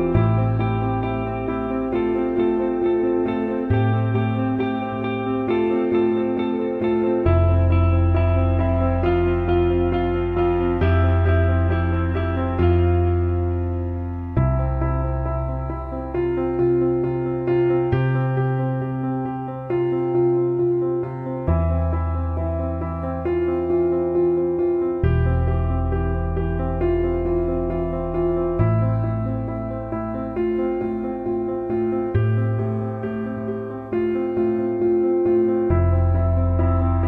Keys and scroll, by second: 29.9 b, 36.3 [.